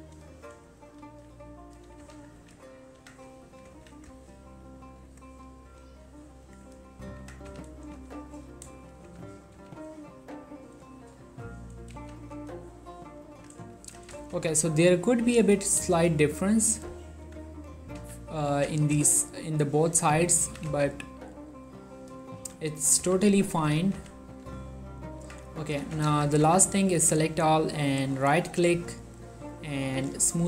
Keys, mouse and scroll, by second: 0.1 click, 1.1 g, 1.7 click, 2.1 z, 2.5 1, 3.1 Tab, 3.9 ctrl+a, 4.1 click, 4.4 ctrl+middle click, 5.2 ctrl+click, 5.6 scroll up 1, 5.9 scroll down 1, 6.3 scroll up 1, 6.6 click, 7.3 Tab, 7.6 z, 8.2 ctrl+middle click, 9.2-10.4 typing, 11.7 click, 12.1 z, 13.2 click, 13.9 g, 14.4 z, 14.5-16.1 scroll down 1, 16.9 right click, 17.4 Tab, 18.1 z, 18.6 g, 19.0 z, 20.2 click, 20.6 s, 20.8 x, 22.4 click, 22.5 g, 22.9 right click, 23.1 z, 23.8 z, 24.1 z, 24.6 Tab, 26.2 ctrl+a, 26.4 ctrl+click, 26.5 Tab, 26.7 a, 27.2 right click, 29.0-30.4 drag.